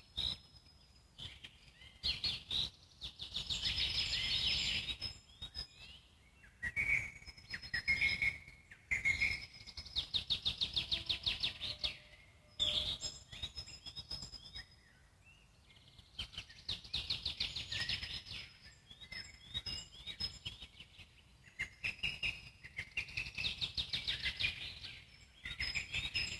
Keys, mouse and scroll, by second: 2.3-2.9 alt+middle drag, 2.9-3.7 scroll up 2, 3.7 Tab, 10.1-11.9 alt+middle drag, 11.9 scroll up 1, 12.7 click, 13.2 middle click, 13.8 `, 14.4 middle click, 14.9-15.2 scroll up 1, 15.2 middle click, 15.6 click, 16.8 click, 17.9 shift+click, 18.7 middle click, 19.4 shift+click, 20.1 shift+click, 21.6-22.6 alt+middle drag, 22.6 scroll down 1, 22.9 alt+middle click, 23.1 z, 24.3-26.0 alt+middle drag, 26.0 ctrl+click.